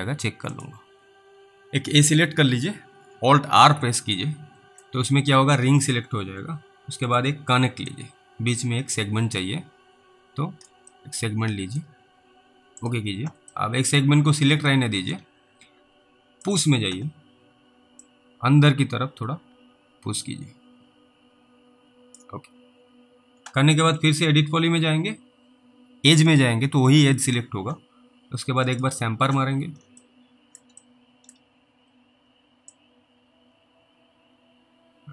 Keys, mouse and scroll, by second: 0.6 click, 3.6 alt+r, 4.6 alt+middle click, 7.1 click, 8.2 alt+middle click, 11.2 middle click, 12.8 click, 13.8 middle click, 14.2 scroll up 1, 15.0 alt+middle click, 16.5 click, 18.3 click, 24.0 click, 30.3 alt+middle click, 31.1 middle click, 33.0 click.